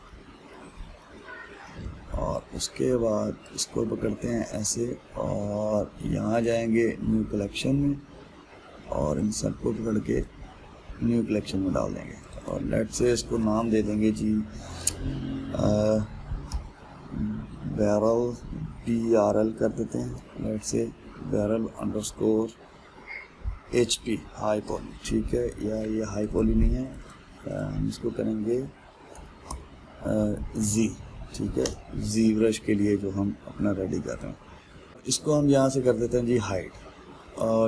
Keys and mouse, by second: 0.1-4.1 shift+middle drag, 4.1 click, 7.1-10.8 drag, 13.0-26.8 drag, 26.9 click, 27.6-32.3 drag, 32.3 BackSpace, 34.9-36.6 ctrl+shift+middle drag, 36.6 click, 37.3-37.6 middle drag.